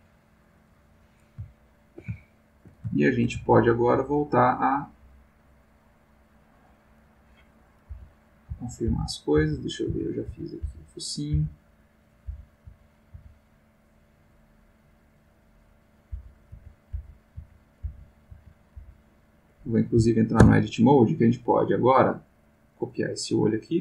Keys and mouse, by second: 1.6-2.8 ctrl+middle drag, 3.0-4.0 ctrl+shift+middle drag, 4.8-6.7 drag, 7.9 Left, 8.5 Right, 8.9 Left, 9.9 Right, 10.6 Left, 12.3 Left, 12.7 Right, 13.9-15.9 drag, 16.1 Left, 16.5 Right, 16.9 Left, 17.3 Right, 17.8 Left, 18.3 Right, 18.7 Left, 20.4 Tab, 21.2 click, 22.8-23.5 drag.